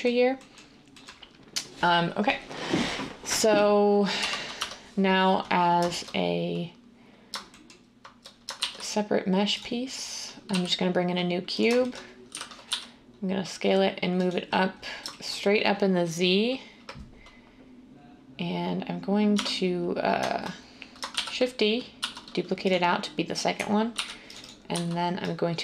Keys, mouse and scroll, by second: 4.2 1, 4.5 Tab, 8.6 a, 10.4 s, 12.2-12.6 typing, 19.3 Tab, 21.1-22.0 typing, 23.9 ctrl+r, 24.7 z.